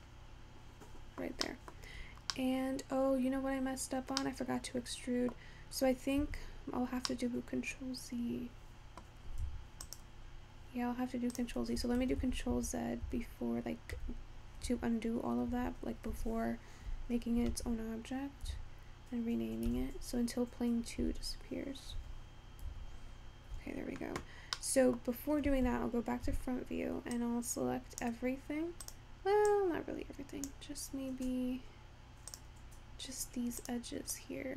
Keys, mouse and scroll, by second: 3.5-4.6 scroll up 3, 4.6-10.0 middle drag, 10.0 click, 12.7 ctrl+z, 13.0 ctrl+z, 13.6 ctrl+z, 15.4 ctrl+z, 15.8 ctrl+z, 16.6 ctrl+z, 18.3 ctrl+z, 18.6 ctrl+z, 20.5 ctrl+z, 21.4 ctrl+z, 22.3 ctrl+z, 23.7 ctrl+z, 25.0-26.2 middle drag, 27.5 click, 29.0-29.9 drag, 32.4 click, 33.8-34.2 drag.